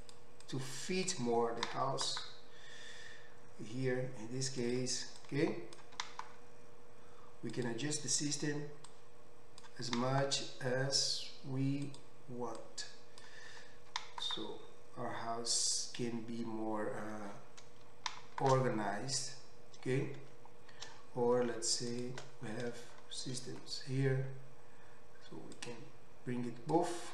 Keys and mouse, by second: 0.2 middle click, 0.6-4.8 drag, 1.6 g, 4.8 middle click, 5.2-7.6 drag, 6.0 g, 7.6-9.0 middle drag, 9.0-12.0 drag, 10.0 g, 12.0 middle click, 12.6-15.8 drag, 13.8 g, 15.8-25.6 middle drag, 20.3 Tab, 25.6-27.1 drag.